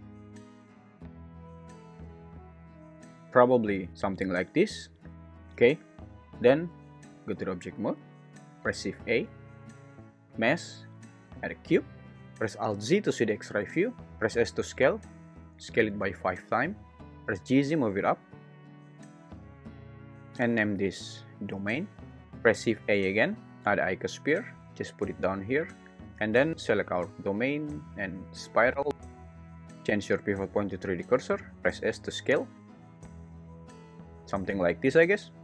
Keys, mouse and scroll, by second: 5.9 Tab, 8.8 shift+a, 12.2 Escape, 12.2 s, 12.2 9, 12.7 alt+z, 14.1 s, 14.3 s, 16.0 5, 17.1 Escape, 17.1 1, 17.3 g, 17.6 z, 21.0-22.2 drag, 22.2 shift+a, 22.5 shift+a, 28.9 Escape, 28.9 ., 29.7-31.0 drag, 31.8 s, 34.8 `.